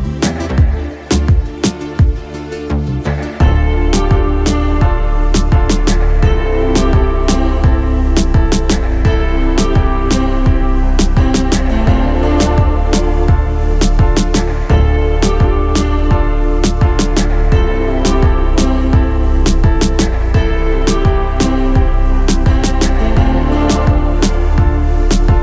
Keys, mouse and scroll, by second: 1.7-2.0 shift+middle drag, 2.3 shift+middle drag, 2.8-3.5 middle drag, 4.2-9.9 middle drag, 10.2-10.5 shift+middle drag, 11.1-11.4 shift+middle drag, 11.6-12.8 middle drag, 14.2 click, 15.6-16.2 shift+drag, 16.6-17.1 shift+drag, 17.6-18.3 shift+middle drag, 19.1-21.1 middle drag, 21.7 shift+middle drag, 22.6-23.0 middle drag, 23.2 shift+middle drag, 23.6 middle click.